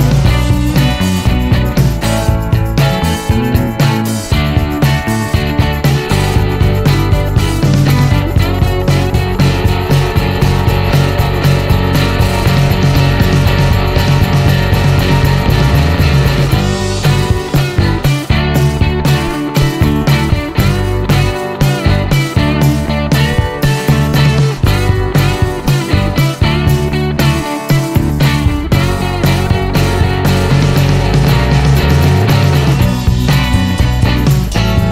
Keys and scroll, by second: 3.1-4.5 typing, 17.6-25.6 typing, 27.6 Return, 28.6-30.1 typing, 30.4 Return, 34.1 Return.